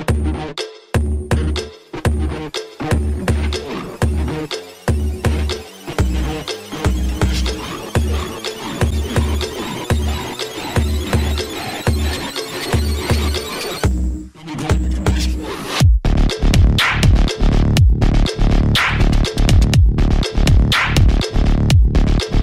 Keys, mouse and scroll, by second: 0.5 ctrl+j, 8.8 click, 8.8 click, 21.1 click, 21.6-22.1 scroll down 1.